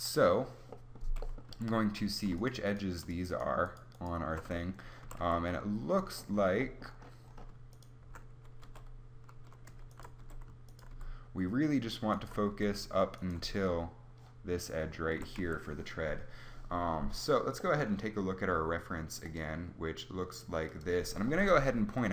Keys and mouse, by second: 1.4 a, 5.0 a, 5.1 a, 8.6 h, 10.1 h, 10.8 h, 12.4 h, 13.3 h, 15.0 a, 15.3 a.